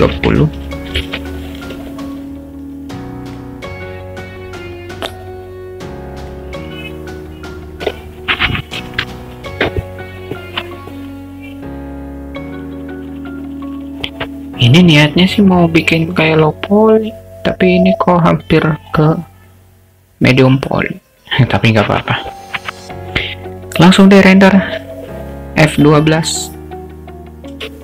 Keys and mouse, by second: 7.7-11.5 drag, 27.6 F12.